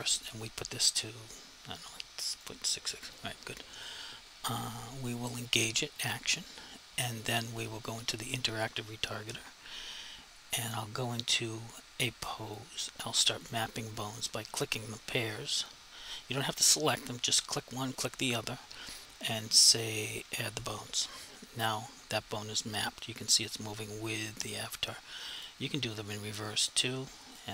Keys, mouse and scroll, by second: 0.5 click, 6.2 click, 11.3 click, 13.5 click, 20.6 click, 22.4 click, 25.4 click.